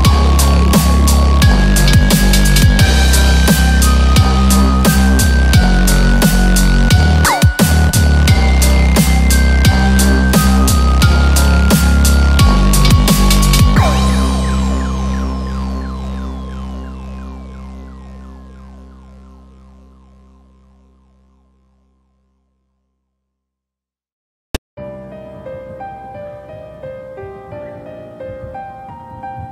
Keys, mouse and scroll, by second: 2.0 click, 2.9 click, 2.9 scroll up 9, 3.6 click, 4.3-4.9 scroll up 3, 4.5 middle click, 5.0 middle click, 5.8-6.2 scroll down 2, 6.1 middle click, 7.2 shift+a, 11.2-12.4 typing, 13.5 4, 25.3 Tab, 25.3 e, 25.5 e, 27.9 click, 27.9 2.